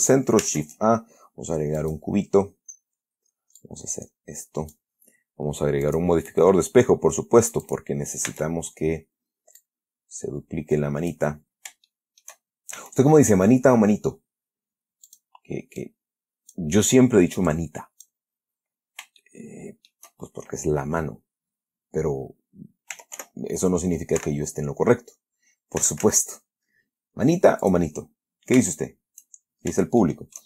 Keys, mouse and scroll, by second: 0.1-0.6 shift+middle drag, 0.7 shift+a, 2.1 click, 3.0-3.3 scroll down 2, 3.9-5.2 drag, 6.2 click, 8.0 click, 8.6 Tab, 9.9-11.6 drag, 11.7-12.2 scroll up 1, 12.2 shift+middle click, 13.1 shift+s, 15.4 click, 16.1 click, 17.8 click, 18.9 scroll up 2, 19.5 shift+middle click, 23.2 r, 23.9 y, 24.5 Escape, 26.1 s, 26.5 z, 27.9 click, 29.1-30.0 shift+scroll up 2, 30.0-30.3 shift+scroll down 2, 30.3-30.4 shift+middle drag.